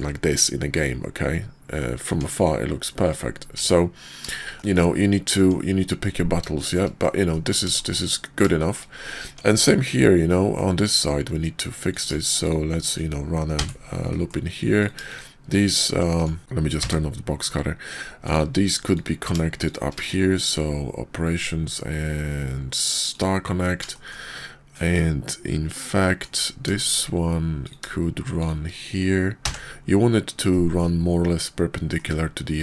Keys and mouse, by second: 2.1 Tab, 3.6 Tab, 4.4 shift+click, 5.3 Tab, 6.5 shift+click, 7.0 click, 7.7 shift+click, 8.5 shift+click, 9.2 Tab, 10.2 click, 11.9 click, 12.3 shift+click, 13.5 j, 14.0 click, 15.0-16.3 shift+drag, 16.4 ctrl+z, 16.8 w, 18.3 click, 18.9 ctrl+click, 19.6 shift+click, 19.9 q, 23.9 shift+click, 25.7 click, 27.5 click, 28.3 shift+click, 29.4 j, 30.4 click, 31.9 click, 32.5 click.